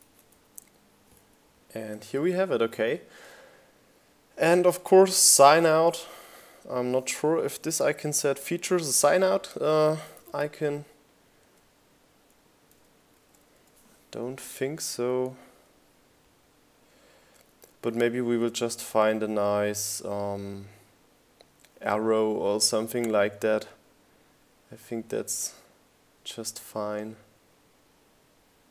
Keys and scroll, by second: 3.9-5.1 typing, 7.0 BackSpace, 8.2 BackSpace.